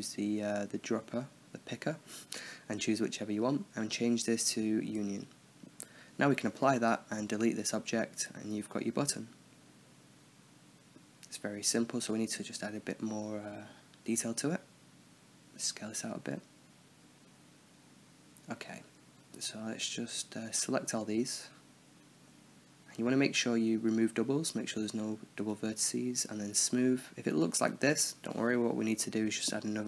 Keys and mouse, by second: 3.3-7.2 drag, 7.2-8.1 right drag, 8.1-9.0 drag, 8.7 x, 9.3-10.5 middle drag, 11.6 Tab, 12.2 middle click, 13.2-15.5 drag, 14.6 s, 15.9 click, 16.0 Tab, 18.1 t, 19.0 Tab, 19.5 a, 20.0 drag, 20.3 a, 22.2-27.5 drag, 27.5 Tab, 27.8-29.0 middle drag, 29.2 t.